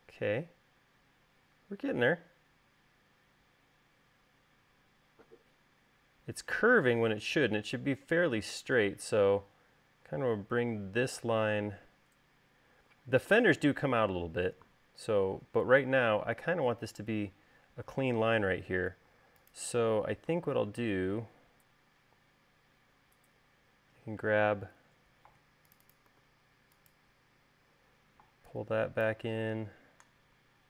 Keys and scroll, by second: 19.8 u, 26.3 v.